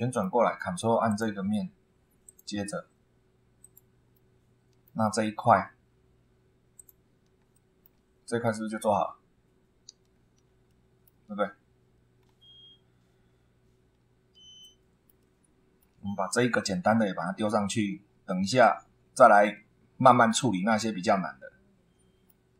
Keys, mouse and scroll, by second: 1.1 ctrl+click, 2.2 click, 3.6 click, 4.1 middle click, 6.7 click, 7.5 shift+middle click, 10.1 scroll down 1, 10.7 shift+middle click, 12.2 scroll down 1, 13.9 scroll up 2, 14.6-16.0 shift+middle drag, 19.5 scroll down 2, 20.3-22.5 middle drag.